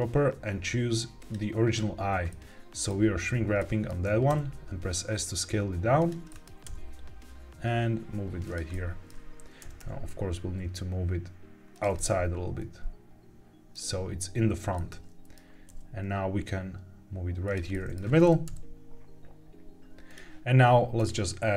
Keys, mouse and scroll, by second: 2.2 middle click, 3.5 middle click, 4.2 s, 5.9 click, 6.2 middle click, 7.2 g, 8.4 click, 8.6 middle click, 9.5 g, 9.7 y, 11.6 click, 11.9-13.7 middle drag, 14.7 middle click, 15.6 g, 17.4 click, 17.6 middle click, 18.4 KP_1, 20.0 click, 20.9-21.5 drag.